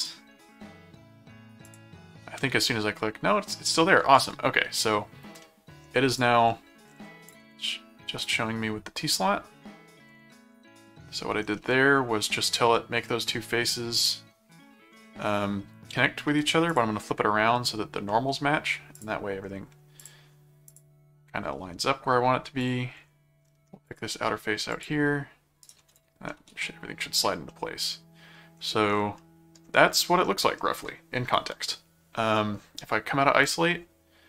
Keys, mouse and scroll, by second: 0.0 click, 1.6 click, 4.2 middle click, 5.4 middle click, 6.1 click, 7.3 ctrl+click, 8.2 click, 11.6 middle click, 12.7 middle click, 14.0 middle click, 15.2 middle click, 16.7 click, 18.1 middle click, 18.9 click, 20.0 click, 20.7 click, 22.6 click, 23.9 click, 24.7 click, 25.6 right click, 26.5 ctrl+7, 27.5-28.5 middle drag, 29.2 middle click, 30.2 middle click, 33.4 click.